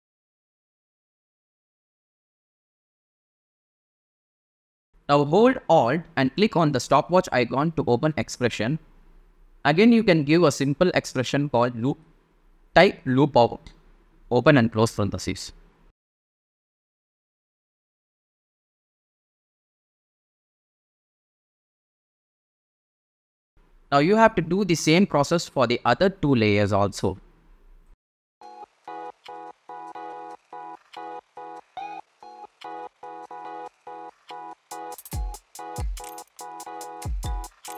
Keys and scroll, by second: 7.6 super+v, 10.0 super+a, 10.9 super+BackSpace, 12.6-17.4 typing, 18.6 super+a, 18.9 super+c, 20.4 space, 23.8 space, 29.3 p, 35.5 F9.